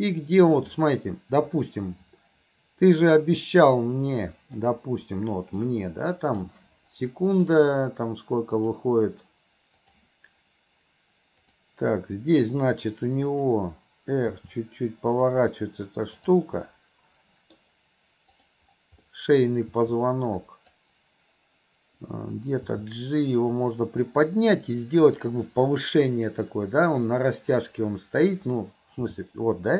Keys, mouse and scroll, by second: 0.5-4.7 drag, 5.7-6.5 drag, 11.5 click, 13.3 click, 16.2 click, 16.7-17.6 middle drag, 18.4 click, 19.1 middle click.